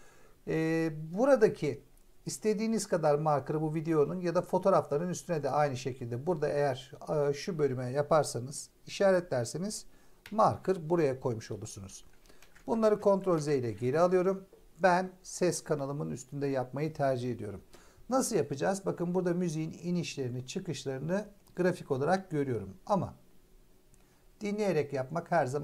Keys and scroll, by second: 10.1 m, 12.3 ctrl+z.